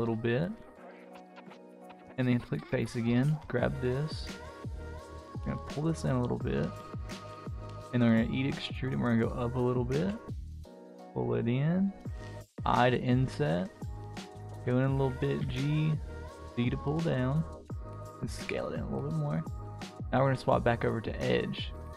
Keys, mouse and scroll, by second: 1.5 click, 2.5 click, 5.1 s, 7.5 e, 9.9 s, 11.6 middle click, 14.9 g, 17.7 s, 19.5 click, 19.8 click, 21.6 alt+click.